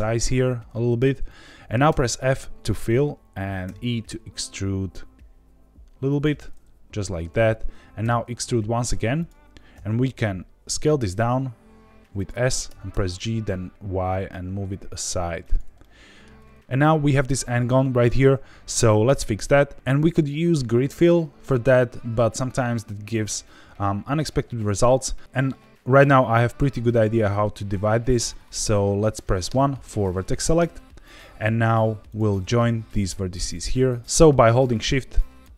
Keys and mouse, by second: 0.8 click, 1.2 middle click, 1.8 f, 3.6 e, 6.0 click, 6.3 middle click, 8.0 e, 9.1 click, 9.7 s, 12.1 click, 12.6 g, 12.9 y, 15.4 click, 15.8 shift+middle click, 17.8 shift+middle click, 18.2 middle click, 29.4 1, 32.0 click, 33.4 click.